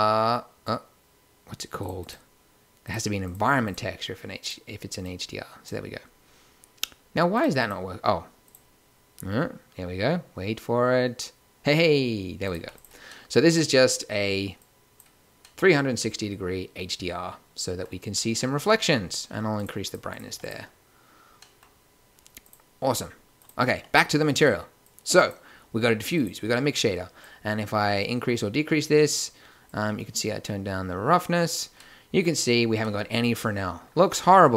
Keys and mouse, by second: 7.3 click, 12.5 g, 13.1-13.8 drag, 14.8-15.6 middle drag, 18.0-18.4 middle drag, 19.2-19.6 middle drag, 19.6-21.2 drag, 21.2 middle click.